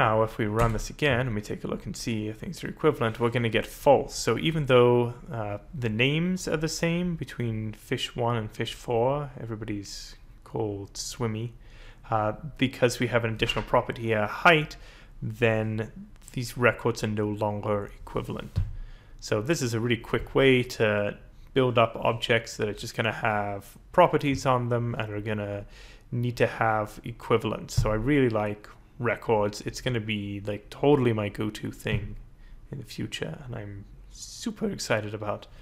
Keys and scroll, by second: 0.6 Return.